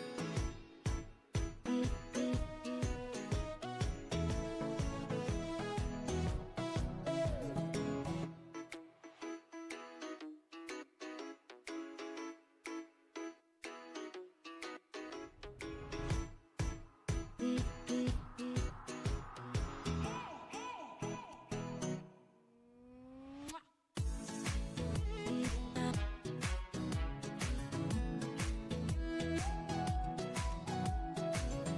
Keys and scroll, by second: 4.9 space.